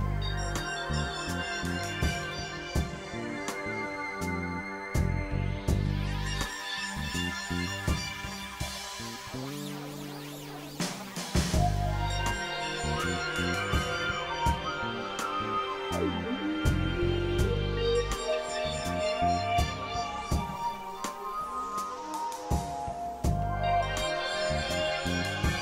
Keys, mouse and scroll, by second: 0.9 click, 2.8 x, 3.1 x, 3.3 click, 4.1 click, 5.9 click, 6.6 click, 7.3 click, 8.2-9.1 drag, 9.3 alt+click, 10.1 click, 11.1 click, 12.1-13.1 drag, 13.8 click, 14.5 click, 15.2-16.3 drag, 18.0 click, 19.2 click, 20.2 click, 21.4 click, 22.3 click, 23.0 click, 24.0 click, 24.9 click.